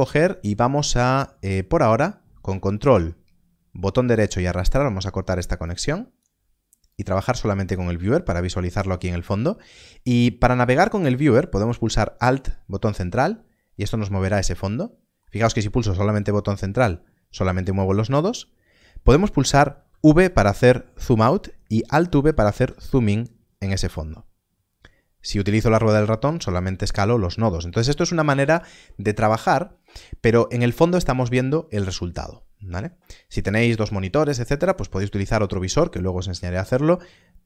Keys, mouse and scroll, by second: 2.4 click, 3.0 ctrl+right click, 5.6 click, 12.3 alt+middle click, 15.9 middle click, 19.7 v, 20.3 v, 24.7-25.8 scroll down 1, 33.2-35.6 scroll down 1.